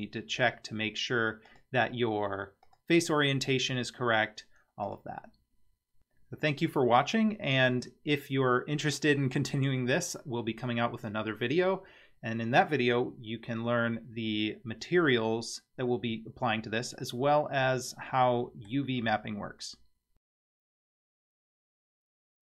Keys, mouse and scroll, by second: 1.5-3.3 drag, 4.9-6.0 drag, 17.1-18.7 middle drag.